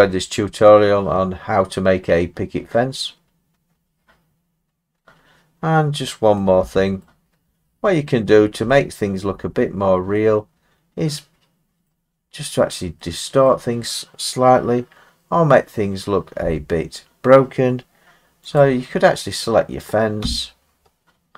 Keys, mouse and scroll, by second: 0.1-0.6 scroll down 4, 4.9-5.2 scroll up 4, 6.3 middle click, 7.0 middle click, 8.2-8.7 scroll up 3, 9.2 scroll down 1, 9.6 middle click, 11.8 middle click, 12.2 middle click, 13.5 middle click, 14.9 middle click, 15.0 middle click, 16.2 scroll down 2, 16.4 Tab, 18.6 click, 20.2 Tab, 20.8-21.3 scroll.